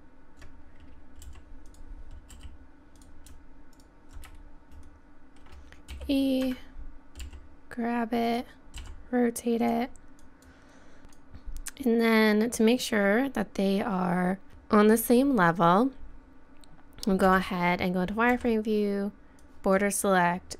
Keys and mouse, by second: 1.2 g, 2.3 r, 3.7 right click, 4.7 KP_1, 4.7 KP_3, 5.9 e, 7.2 g, 8.8 r, 10.2 click, 14.5 middle click, 14.7-16.6 middle drag, 17.3 z, 18.3 b.